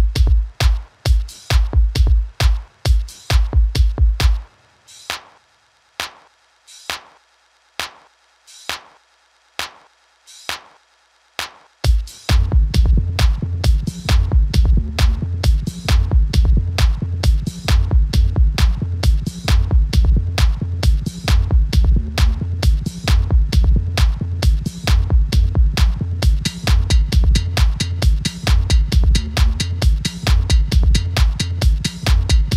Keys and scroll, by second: 17.3 alt+F9.